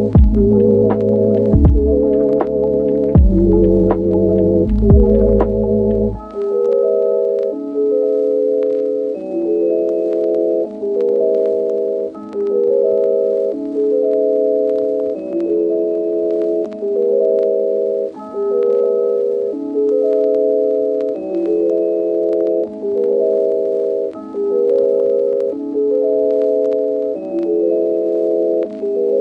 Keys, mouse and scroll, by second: 0.0 ctrl+z, 2.8 ctrl+z, 3.6 ctrl+z, 6.0 ctrl+z, 6.4 ctrl+z, 7.2 ctrl+z, 7.8 ctrl+z, 11.5 click, 13.8 click, 14.0 shift+middle click, 14.8-16.4 shift+middle drag, 16.7 shift+middle click, 18.8 Tab, 19.4-22.7 typing, 21.0 middle click, 24.9 Tab, 25.2 click, 25.5 click, 25.9 Tab, 25.9-27.9 typing, 27.2 click.